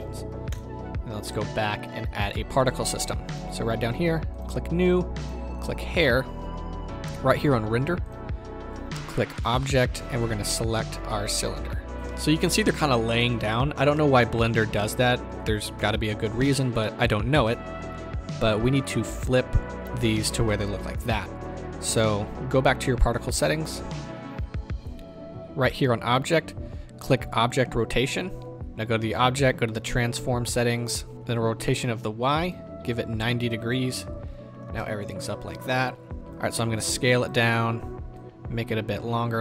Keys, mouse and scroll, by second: 0.5 KP_0, 0.6 click, 3.3 click, 4.3 click, 5.2 click, 6.2-7.1 scroll down 2, 7.1 click, 7.3-8.0 scroll down 2, 8.0-11.3 drag, 11.9 scroll up 2, 12.1-13.2 shift+middle drag, 13.2-13.6 scroll down 2, 13.6-14.0 scroll up 2, 14.0-27.2 shift+middle drag, 16.5-17.1 scroll down 4, 17.1-17.5 scroll up 2, 18.4-19.2 scroll down 2, 19.2-22.5 scroll down 1, 23.2-23.6 scroll up 2, 23.6-23.9 scroll down 2, 23.9-24.4 scroll up 2, 24.4-27.2 scroll down 2, 27.2 click, 28.6-30.2 middle drag, 30.2 click, 31.1 click, 31.3 ctrl+z, 33.9 KP_Enter, 34.5 scroll up 1, 34.6 click, 34.8-36.1 middle drag, 35.4-35.9 scroll down 2, 35.9 scroll up 2, 36.1 right click, 36.3 s, 38.1 click.